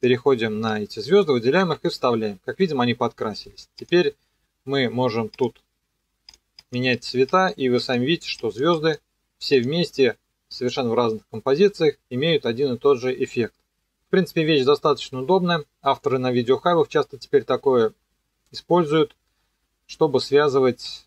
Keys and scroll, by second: 1.6 ctrl+v.